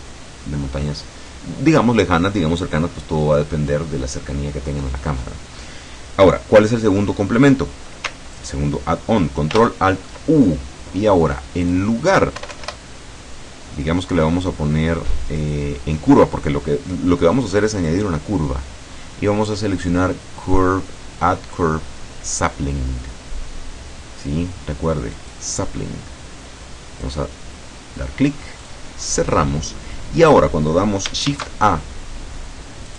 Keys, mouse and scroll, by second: 9.6 ctrl+alt+u, 11.7 click, 12.4 BackSpace, 15.4 click, 17.8 click, 25.2 click, 27.1 click, 28.7 click, 29.5-29.8 scroll down 1, 30.0 scroll up 2, 31.3 shift+a.